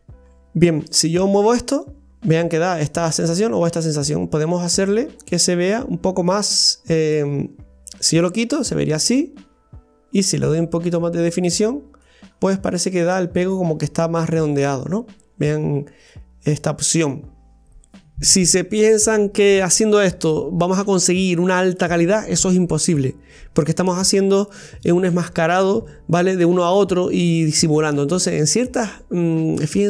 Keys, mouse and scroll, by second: 0.0-0.7 scroll up 2, 1.5-4.4 drag, 12.3 scroll down 1, 12.5-15.5 middle drag.